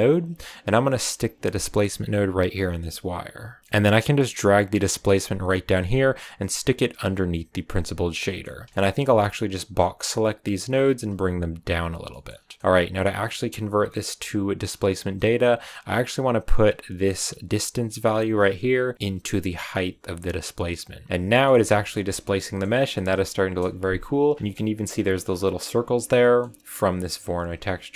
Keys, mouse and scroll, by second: 3.0 click, 3.6 middle click, 4.3 click, 7.6 click, 8.1-8.7 scroll down 3, 8.2 middle click, 8.4 a, 8.7 middle drag, 8.9 b, 10.6 g, 11.9 a, 12.0 scroll down 1, 12.0 middle click, 12.2-12.8 scroll up 3, 13.8 middle click, 14.6-15.2 scroll up 3, 15.6-16.0 scroll down 2, 16.6-17.0 scroll down 1, 17.0-18.9 middle drag, 18.9 click, 21.1 middle click, 21.9 scroll down 1, 22.2-23.4 middle drag, 23.4 KP_0, 24.3 shift+middle click, 24.3 scroll up 5, 26.1 middle click, 26.8 click.